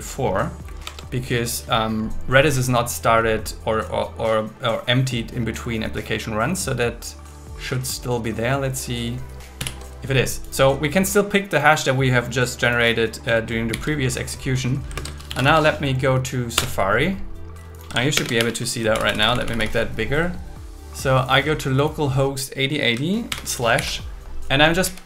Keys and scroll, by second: 9.6 ctrl+t, 13.7 super+c, 15.0 alt+space, 16.6 Return, 16.8 Return, 18.2 alt+shift+space, 23.3 shift+7, 23.8 super+v, 24.8 Left.